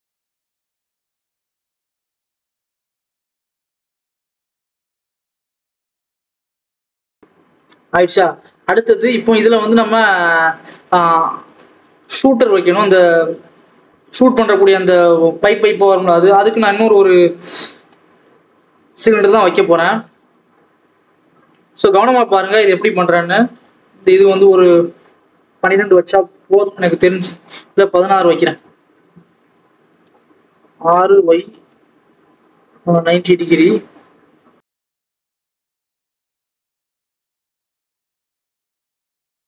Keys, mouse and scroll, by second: 0.7-1.0 scroll up 1, 1.0 click, 1.4 scroll up 1, 1.5 Tab, 1.6 s, 2.6 shift+d, 3.4-3.9 scroll down 1, 3.9 click, 4.2 scroll up 2, 4.5 shift+d, 5.3 scroll down 1, 5.4 Tab, 5.5 alt+a, 5.8 click, 6.5-6.9 scroll up 1, 7.1 click, 8.3 KP_1, 8.8 ctrl+KP_1, 10.8 click, 11.1-18.5 drag, 18.5 shift+a, 19.5 shift+s, 19.7 alt+a, 19.7-21.6 drag, 21.6 shift+a, 25.6-28.1 drag, 28.1 KP_Enter, 29.1-29.5 scroll down 2, 29.5 scroll up 1, 29.8 Tab, 30.6 r, 32.0 KP_1, 32.9 ctrl+KP_3, 33.5 ctrl+KP_1, 34.1 ctrl+KP_3, 34.5 ctrl+KP_1, 35.0 ctrl+KP_3, 35.5 scroll up 2, 35.8 scroll down 1, 35.9 s, 37.0 click, 37.3-37.8 scroll up 4, 37.8 click, 38.0 scroll up 1, 38.1 s, 38.8 KP_7, 39.1 scroll down 1, 39.2 scroll up 1, 39.3 scroll down 1, 39.4 scroll up 1.